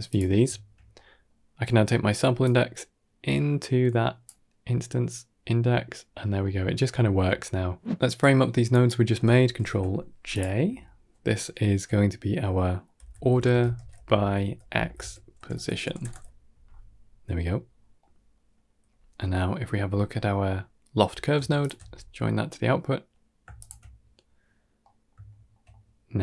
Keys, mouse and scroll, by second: 6.3-6.6 middle drag, 6.9 shift+middle click, 7.4 middle click, 8.0 middle click, 8.2-8.8 drag, 10.2 middle click, 17.9 middle click, 18.5 middle click, 19.1 middle drag, 19.5 middle click, 21.5 alt+shift+middle click, 23.4 ctrl+shift+middle click, 24.7-25.0 middle drag, 25.1 shift+middle drag, 25.6-26.0 middle drag.